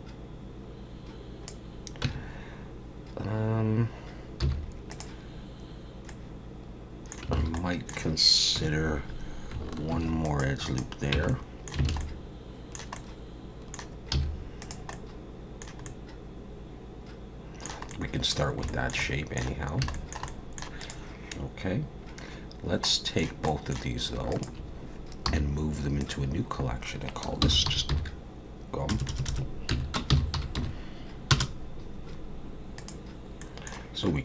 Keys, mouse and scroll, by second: 2.0 Tab, 4.4 z, 6.1 middle click, 7.4 alt+a, 7.5 middle click, 8.6 KP_1, 9.9 ctrl+r, 11.1 Tab, 11.3 middle click, 11.9 alt+a, 12.0 middle click, 13.0 middle click, 14.1 z, 14.9 middle click, 15.8 middle click, 17.9 middle click, 18.7 shift+middle click, 19.0 middle click, 19.6 scroll down 2, 19.9 shift+middle click, 20.3 middle click, 20.8 click, 22.8 middle click, 23.5 middle click, 24.3 shift+click, 25.3 m, 29.1 BackSpace, 33.4 middle click, 34.1-34.2 scroll down 3.